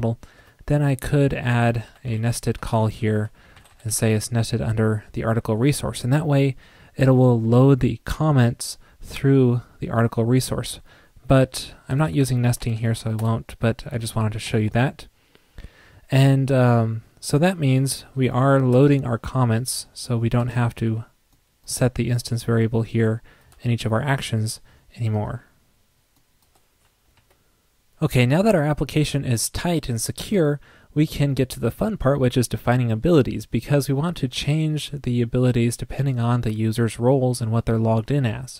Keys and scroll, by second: 12.0 shift+Left.